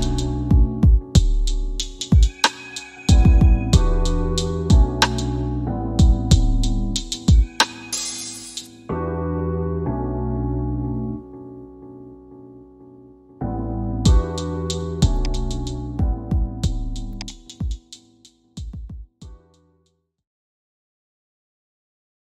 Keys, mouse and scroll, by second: 8.3 space.